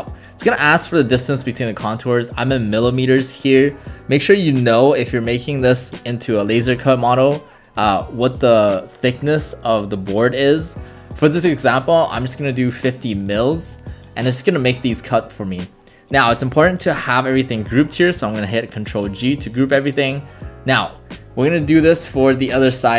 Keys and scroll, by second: 13.2 space, 17.4 ctrl+g, 21.4-22.9 typing.